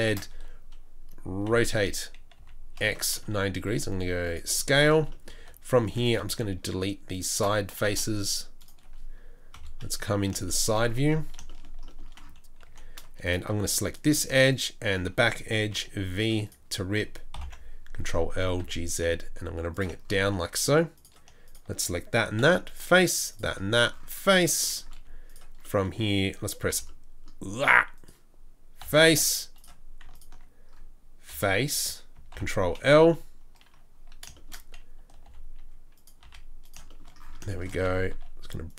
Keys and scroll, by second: 1.4 r, 3.7 s, 5.3 4, 5.8 3, 7.9 Delete, 9.5 KP_1, 9.9 KP_3, 12.6 2, 13.5 2, 13.5 z, 15.7 v, 17.3 ctrl+l, 18.3 g, 22.4 f, 23.7 f, 26.7 g, 28.8 f, 31.3 f, 32.3 ctrl+l, 33.0 KP_3, 35.2 g, 36.2 s, 38.1 s.